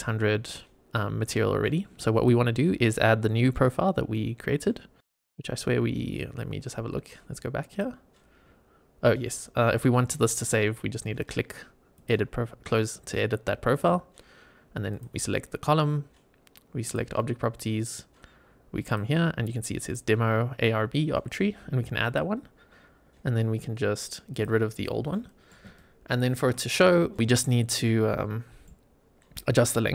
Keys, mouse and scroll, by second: 2.0-5.0 drag, 7.6 click, 8.3-10.8 scroll down 3, 11.8 click, 13.0-14.0 scroll up 3, 14.8 click, 16.7 click, 17.6 scroll down 2, 18.8-19.9 drag, 21.9 click, 24.2 click, 25.0 middle click, 25.7 shift+right click, 27.0 shift+middle click, 27.7 middle click.